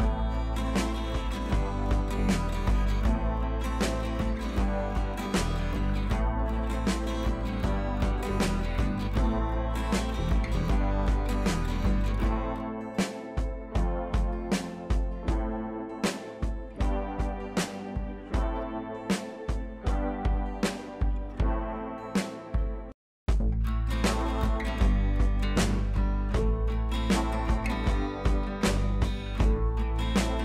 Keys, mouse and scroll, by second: 0.5 ], 0.8 click, 0.9 ], 1.1 ], 1.1 click, 1.7 scroll down 1, 1.9 click, 2.0 space, 2.1 click, 2.3 scroll down 1, 3.3 ], 3.5 click, 6.2 ], 6.3 click, 8.1 ctrl+l, 8.8-10.8 drag, 12.2 scroll up 1, 12.7-13.2 scroll down 1, 13.2 click, 17.7 click, 19.0 click, 28.8-30.4 drag.